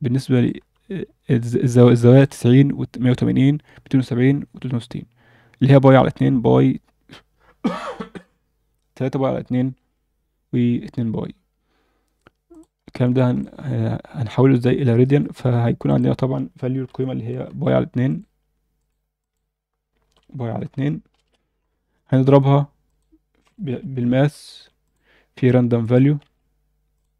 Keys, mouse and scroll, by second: 0.3 click, 0.6 KP_7, 2.0 shift+middle click, 12.5 click, 12.9 scroll down 1, 13.1 alt+shift+middle click, 15.0 shift+a, 19.2-21.1 drag, 21.5 scroll up 2, 22.2 shift+a, 26.2 shift+a.